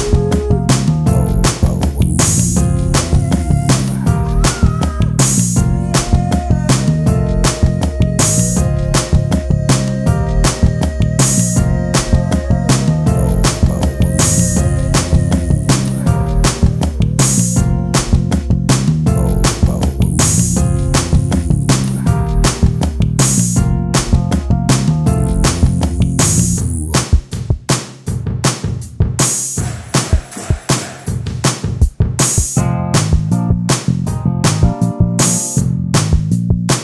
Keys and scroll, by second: 2.6 space, 4.3 space, 7.8 ctrl+space, 13.5 ctrl+space, 15.5 ctrl+space, 17.7 space, 28.1 t, 34.4 t.